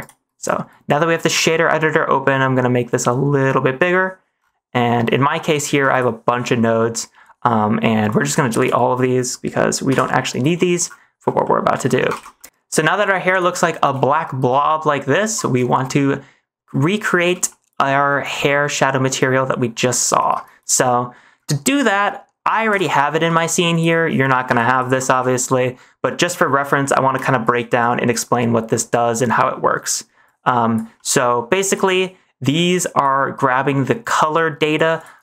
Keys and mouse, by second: 2.8 click, 4.7 middle click, 5.4 middle click, 5.8 click, 6.7 middle click, 8.0-8.6 drag, 9.9 Delete, 11.3 middle click, 12.1 ctrl+s, 12.4 middle click, 13.6 shift+middle click, 15.1 -, 15.7 shift+middle click, 17.4 shift+middle click, 18.5 middle click, 20.1 -, 20.9 middle click, 22.1 middle click, 22.6 ctrl+v, 23.2 g, 24.4 g, 25.1 ctrl+s, 25.3 middle click, 27.1 click, 28.6 middle click, 29.4 middle click, 30.2 click, 31.0 middle click, 31.6 click, 32.0 middle click, 32.6 click, 33.8 click, 34.2 click.